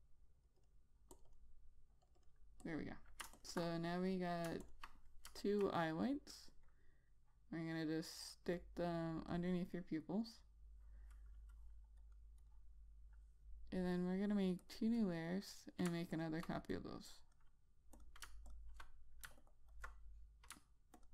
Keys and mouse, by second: 1.8 double click, 2.6 click, 2.7 double click, 3.1 click, 5.1 ctrl+click, 6.3 click, 12.9 double click, 15.1 click, 19.9 alt+click.